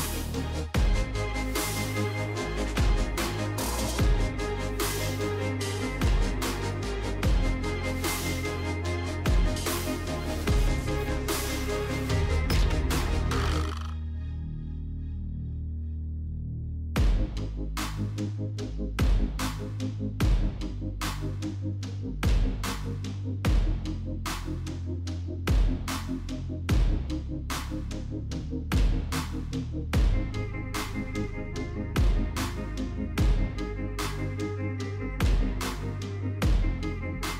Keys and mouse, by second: 0.2 KP_3, 1.8 Tab, 2.8 alt+click, 3.8 alt+middle click, 4.2 alt+z, 5.4 KP_3, 6.7-8.9 ctrl+drag, 9.5 KP_Decimal, 11.0 middle click, 12.4 ctrl+click, 13.3 ctrl+click, 14.3 ctrl+click, 15.7 KP_3, 16.0 KP_Decimal, 18.2 click, 19.5 ctrl+click, 21.2 KP_Decimal, 22.1 alt+z, 23.0 shift+click, 24.4 g, 26.4 Tab, 26.8 alt+z, 27.2 click, 27.8 alt+z, 28.5 Tab, 28.8 click, 29.1 Tab, 30.3 middle click, 31.8 middle click, 32.3 Tab, 33.1 alt+click, 34.3 s, 36.6 Tab, 37.2 middle click.